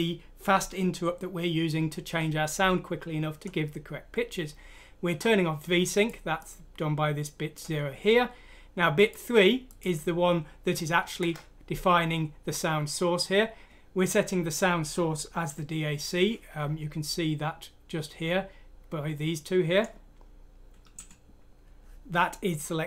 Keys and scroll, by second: 11.1 Left.